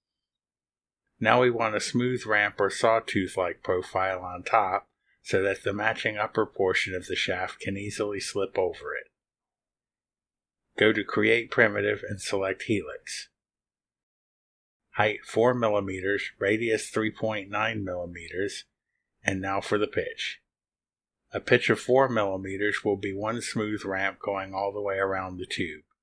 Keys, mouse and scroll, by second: 0.2 click, 1.1 click, 1.2 middle click, 1.4-4.0 right drag, 8.0 click, 8.1 middle click, 8.8 scroll up 1, 9.6 click, 9.7 middle click, 10.2-12.1 scroll up 1, 12.1 click, 13.2 click, 14.4 click, 17.0 click, 17.6 4, 18.4 click, 19.5-20.7 typing.